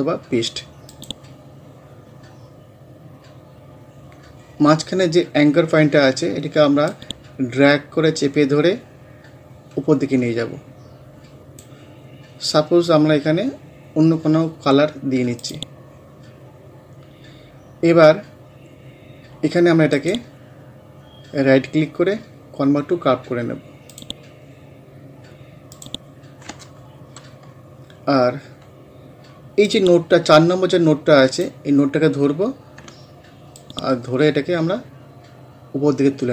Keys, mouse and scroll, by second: 0.9 click, 6.9-14.2 drag, 15.4 click, 17.1 scroll up 1, 19.9 right click, 20.0 right click, 23.9 click, 26.2 scroll down 1, 28.2 scroll up 1, 29.7-33.6 drag, 33.6-36.3 ctrl+drag.